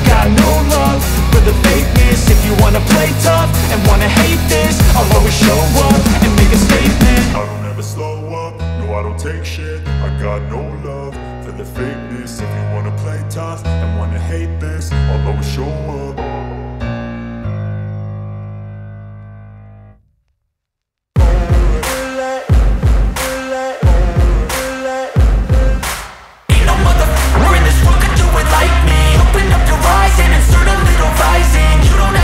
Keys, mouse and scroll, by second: 1.6 click, 3.0 click, 15.3 scroll up 4, 15.7-16.2 scroll, 17.1 click, 20.2-20.7 scroll, 27.1 scroll, 28.3 click, 30.2 scroll.